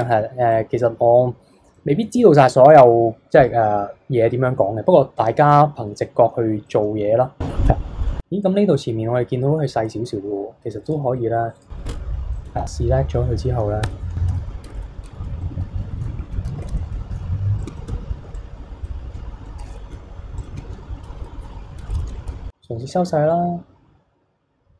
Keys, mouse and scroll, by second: 0.5-1.4 middle drag, 1.4-1.7 scroll down 2, 1.7-4.8 middle drag, 6.0-8.2 middle drag, 8.2 scroll down 1, 8.4-10.8 middle drag, 10.8 click, 11.5 click, 11.9 Tab, 12.1 scroll up 2, 12.4-13.8 middle drag, 13.8 KP_3, 14.6 KP_3, 14.8 KP_1, 15.1 KP_3, 15.4-16.6 middle drag, 16.6 KP_1, 17.6 click, 17.8 shift+middle click, 18.2 b, 19.3 scroll up 1, 19.5 middle click, 20.4 alt+shift+click, 21.2 KP_3, 21.9 KP_1, 22.3 s.